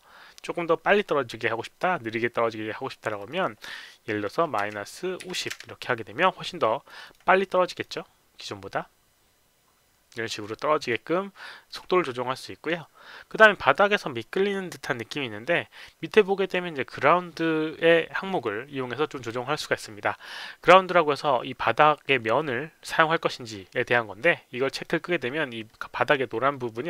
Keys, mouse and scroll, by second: 2.9 click, 3.1 click, 4.6 KP_Subtract, 5.3 KP_Subtract, 5.3 KP_0, 5.3 KP_5, 6.1 KP_Subtract, 6.1 KP_0, 6.1 KP_5, 6.8 click, 7.0 click, 7.6 click, 9.1 KP_0, 9.1 KP_5, 10.7 click, 11.6 click, 24.6 click.